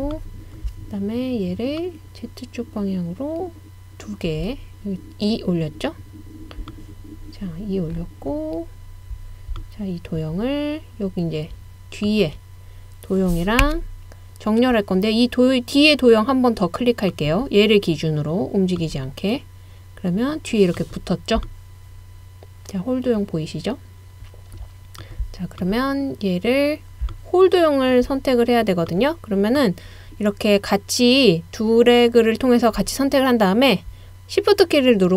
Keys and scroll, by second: 13.6 i.